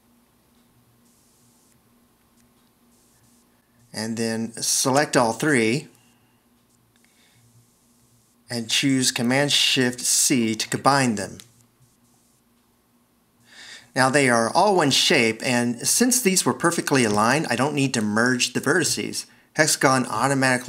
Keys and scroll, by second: 10.5 shift+super+c, 13.3 c.